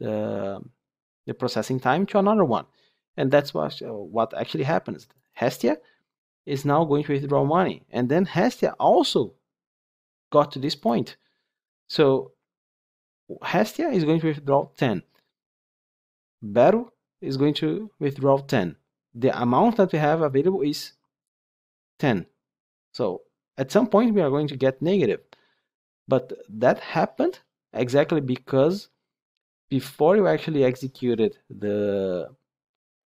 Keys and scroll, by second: 10.8 ctrl+F8.